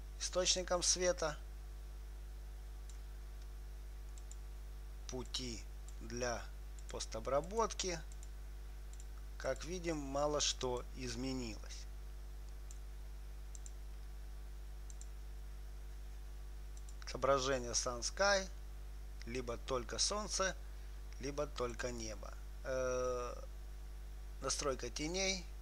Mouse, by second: 4.6-13.1 drag, 13.9-21.7 drag, 22.0-24.0 drag.